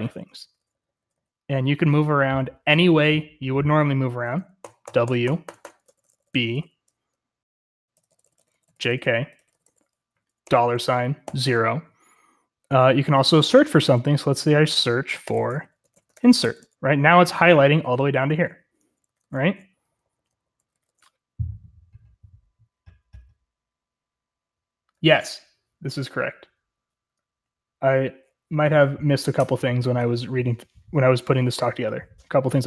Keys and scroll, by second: 0.0-1.1 typing, 4.4-11.3 typing, 15.4-21.3 typing.